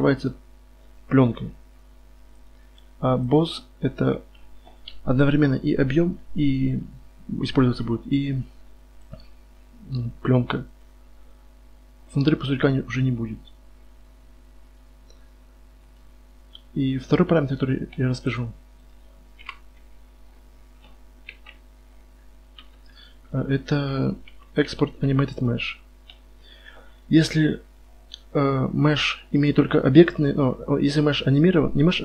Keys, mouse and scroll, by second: 1.1-5.1 middle drag, 5.1 KP_1, 9.0-10.9 right drag, 10.9-12.7 drag, 13.3-15.2 middle drag, 15.8-18.2 right drag, 18.4-19.4 drag, 18.8 right click, 19.4 KP_Divide, 19.7 z, 20.1 middle click, 20.6 middle click, 21.1-21.9 middle drag, 21.3 KP_5, 22.6 KP_5, 24.3 KP_Divide, 24.9 KP_1, 25.3 right click, 27.9-30.4 right drag.